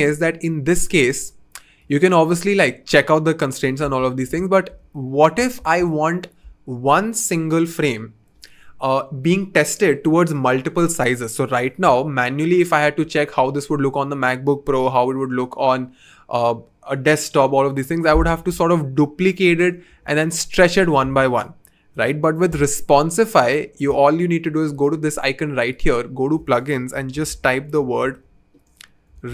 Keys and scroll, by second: 1.1 v, 3.8 super+z, 19.9 v, 21.0 super+z, 21.9 BackSpace, 26.7-29.3 typing.